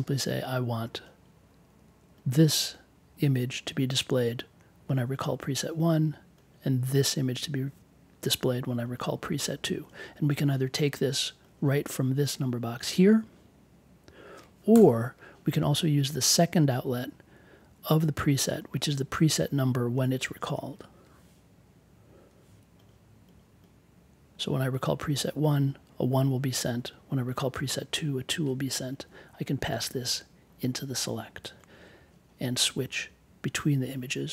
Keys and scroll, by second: 14.7 BackSpace, 22.0 i.